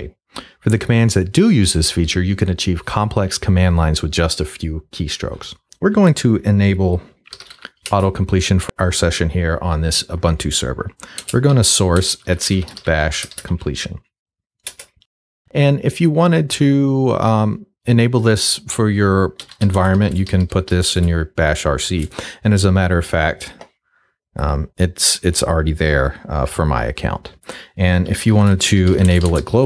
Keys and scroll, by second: 7.0-7.9 typing, 11.2-13.3 typing, 13.5 shift+Tab, 14.7 Return, 19.2-21.2 typing, 27.9-29.6 typing.